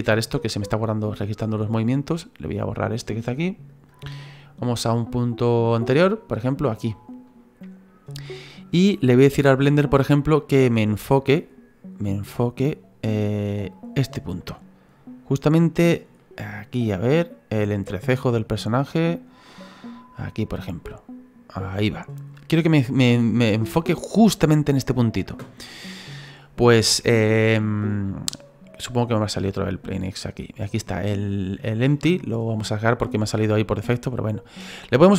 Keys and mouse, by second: 0.7 click, 2.4 right click, 3.2 Delete, 3.7 click, 4.3 click, 6.9 middle click, 10.1 click, 12.0 middle click, 13.7 click, 16.2 middle click, 17.5 click, 18.9 click, 19.5 middle click, 20.6 click, 22.3 middle click, 29.7 click, 31.9 click, 33.9 click, 34.9 click, 35.0 click.